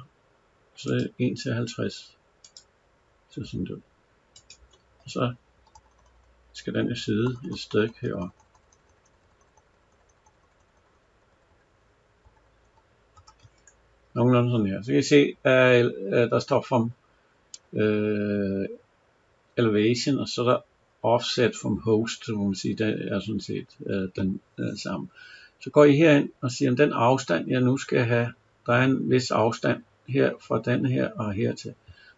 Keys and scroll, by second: 5.4 Up, 13.0 Down.